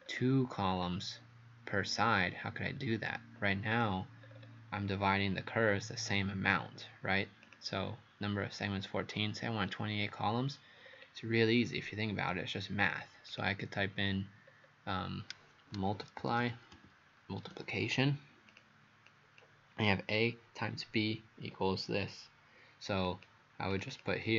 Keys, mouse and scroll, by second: 0.0-3.7 scroll up 7, 3.7 click, 4.3-5.0 scroll up 4, 5.0-5.4 scroll up 1, 5.7-6.1 scroll down 3, 6.5-7.5 scroll up 3, 7.5 click, 10.9-11.3 scroll down 3, 11.6-12.0 scroll up 2, 12.3 scroll down 1, 13.3 click, 13.5 click, 14.5-15.2 scroll up 2, 16.0-17.3 typing, 18.5 click, 19.1 click, 23.1 click, 23.7 click.